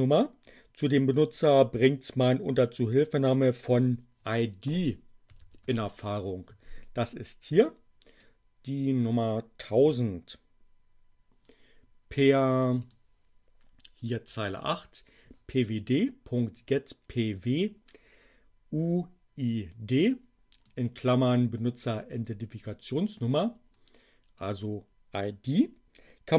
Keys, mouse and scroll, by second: 5.0-5.9 typing, 8.1-9.4 drag, 12.9 click, 14.3 Delete, 15.9-20.7 drag, 24.3 click.